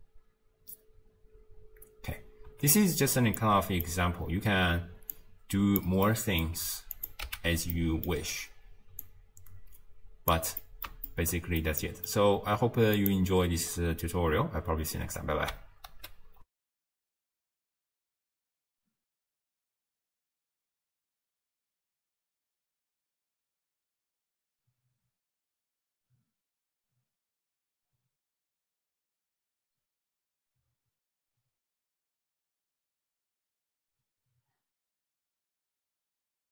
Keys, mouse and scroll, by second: 2.6 space, 3.4-5.1 middle drag, 5.1 click, 6.1-7.0 middle drag, 7.0 click, 7.3 x, 7.7 middle click, 8.4 scroll down 2, 9.1 click, 10.6-12.4 middle drag, 12.4-13.0 scroll up 1, 13.0 click, 16.0 ctrl+alt+shift+q, 16.5 ctrl+alt+shift+w.